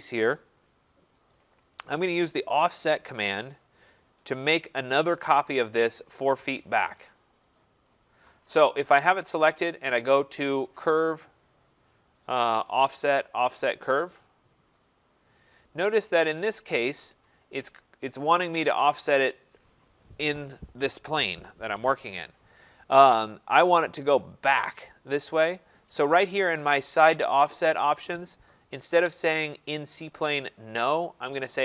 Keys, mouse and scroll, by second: 5.5 click, 11.4 click, 14.2 click, 16.1-16.5 scroll.